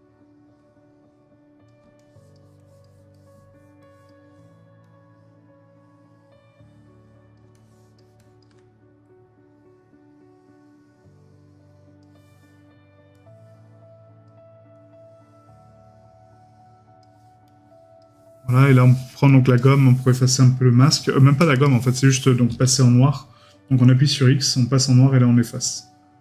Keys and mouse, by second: 3.1 middle click.